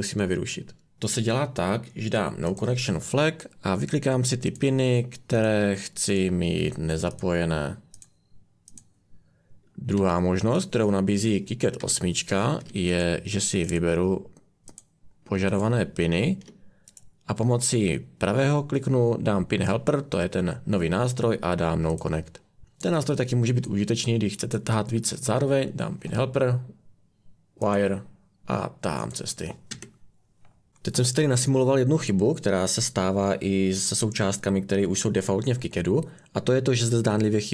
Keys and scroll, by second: 9.9 Escape, 11.8 Delete, 22.6 Escape, 29.7 Escape.